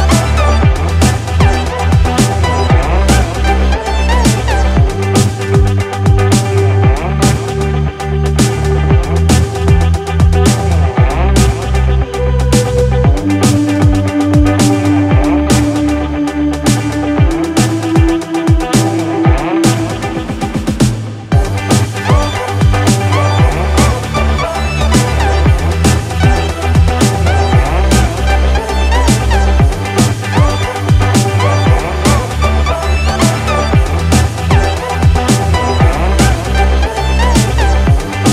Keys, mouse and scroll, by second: 9.0 click, 24.2 click, 30.1 click, 36.1 click.